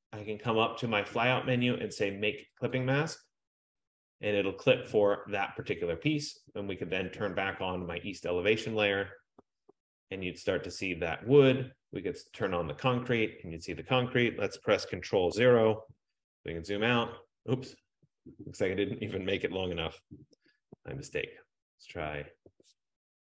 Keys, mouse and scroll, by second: 0.6 click, 2.9 click, 7.9 click, 12.7 click, 15.8 ctrl+0, 21.2 ctrl+=, 22.6 ctrl+=, 22.7 ctrl+=.